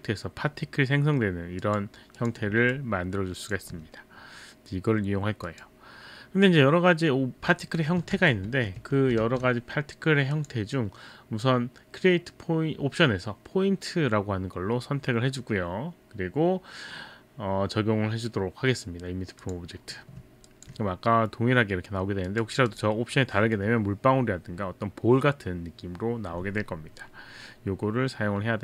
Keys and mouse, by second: 1.6 click, 2.2 click, 5.5 click, 8.1 ctrl+z, 8.5 ctrl+z, 9.3 shift+z, 10.3 click, 19.4 click, 22.3 click, 22.7 click.